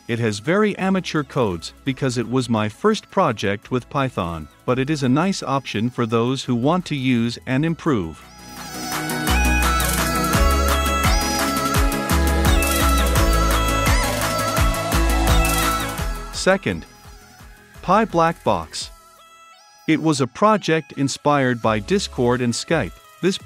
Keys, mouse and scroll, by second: 3.4 click, 3.8 right click, 4.1 click, 4.7 middle click, 4.9 F5, 5.7-8.3 drag, 8.3 middle click, 8.3 scroll, 8.8-10.7 drag, 10.7 middle click, 10.7-11.2 scroll up 2, 11.2-14.1 drag, 14.1-15.8 middle drag, 19.6 click, 20.5-21.7 typing, 22.1 Return, 23.0-23.4 drag.